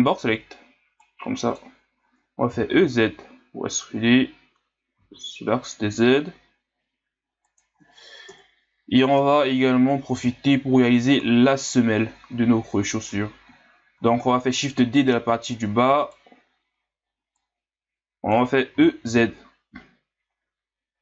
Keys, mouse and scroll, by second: 0.2 b, 2.5 e, 8.3 KP_Divide, 9.2 KP_1, 10.1 z, 14.0 shift+d, 17.4-18.8 drag, 18.8 e.